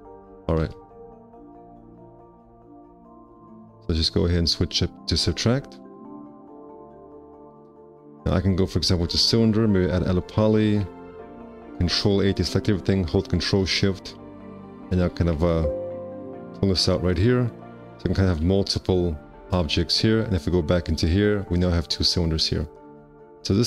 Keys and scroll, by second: 1.6 alt+q, 2.4 alt+q, 9.8 `, 10.7 5, 18.2 5, 18.4 q.